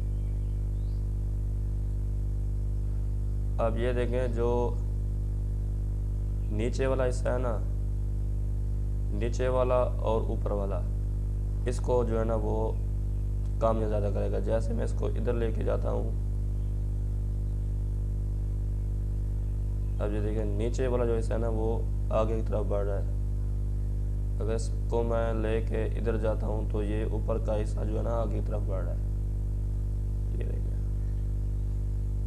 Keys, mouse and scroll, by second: 2.1-15.1 drag, 25.9-32.2 drag.